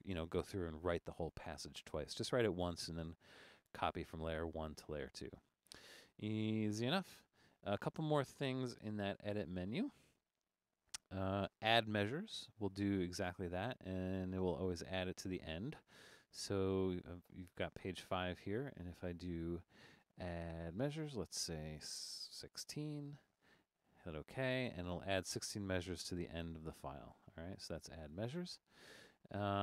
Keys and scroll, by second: 9.0 super+-, 9.2 super+-, 22.2-23.2 typing.